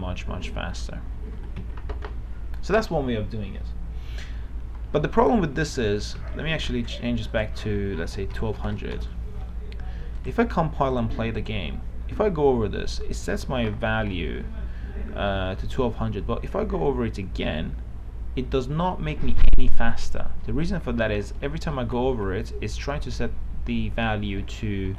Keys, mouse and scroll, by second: 2.0 Escape, 5.4 click, 7.2 Escape, 7.5 click, 8.6 KP_1, 8.8 KP_2, 9.0 KP_0, 10.4 click, 12.0-12.7 w.